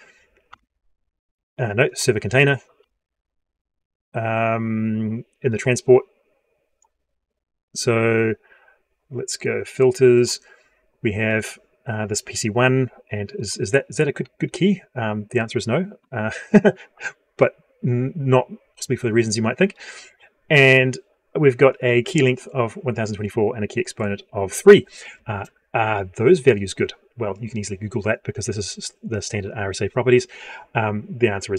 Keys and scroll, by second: 0.3 F12.